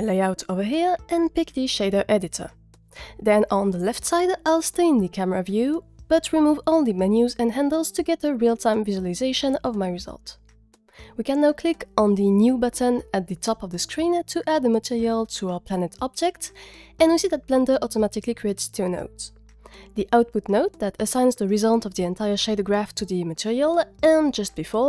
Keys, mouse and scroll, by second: 0.6 click, 2.3 n, 3.1 t, 5.0 middle click, 6.8 drag, 7.3 click, 10.3-11.9 drag, 14.7 click, 16.4 middle click, 17.1-18.9 middle drag, 19.8 click, 20.2 g, 24.6 click.